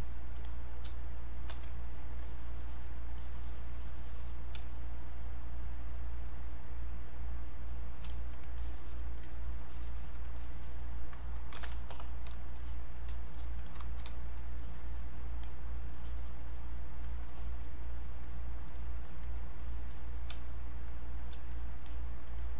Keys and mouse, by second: 0.2 click, 0.9 space, 1.2 click, 1.4 space, 1.8 alt+click, 2.2 click, 3.2-4.6 alt+drag, 4.6 space, 4.9 click, 5.1 space, 7.2 click, 8.1 click, 8.6 alt+click, 9.7 alt+click, 10.4 click, 11.3-12.4 typing, 12.6 click, 13.7 click, 14.6-17.1 drag, 18.8 alt+click, 19.6 click, 20.3 space, 20.9 click, 20.9 space, 21.5 click.